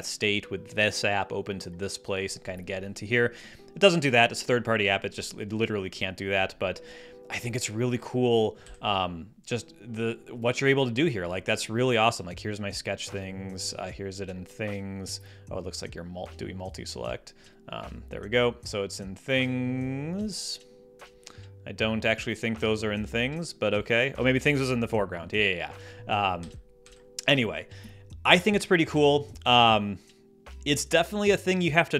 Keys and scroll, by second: 8.5 ⟲, 26.3 Escape.